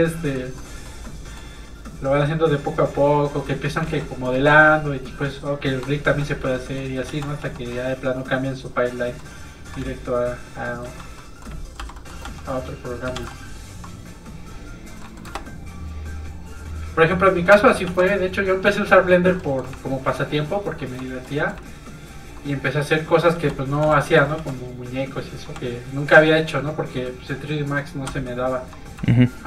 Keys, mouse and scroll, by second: 2.1 f, 2.3 click, 3.8 ctrl+z, 4.3 middle click, 4.4 middle click, 5.0 shift+click, 5.8 click, 5.9 middle click, 6.1 ctrl+z, 6.5 middle click, 7.1 ctrl+z, 7.4 f, 7.5 click, 7.7 middle click, 9.9 ctrl+click, 10.8 ctrl+z, 11.3 middle click, 11.8 i, 11.9 middle click, 12.2 f, 12.4 click, 13.1 shift+f, 13.9 click, 15.0 middle click, 15.3 shift+space, 17.8 shift+f, 18.1 click, 18.3 click, 18.9 shift+click, 19.4 click, 19.5 middle click, 19.8 shift+click, 20.0 shift+click, 20.2 shift+click, 21.2 click, 21.3 middle click, 21.6 shift+click, 22.4 click, 22.5 click, 23.8 k, 24.0 middle click, 24.4 f, 24.5 click, 25.5 f, 25.7 click, 28.2 shift+click.